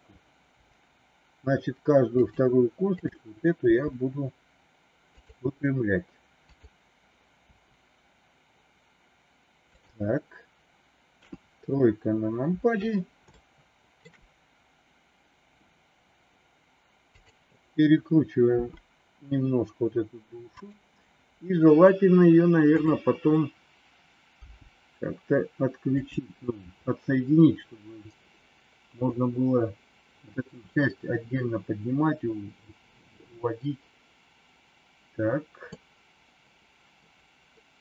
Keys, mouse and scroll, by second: 0.5 r, 3.0 click, 3.6 r, 6.4 click, 7.4 r, 11.1 KP_3, 13.3 shift+middle click, 17.0 click, 18.4 r, 22.8 click, 24.5 g, 35.8-36.9 middle drag.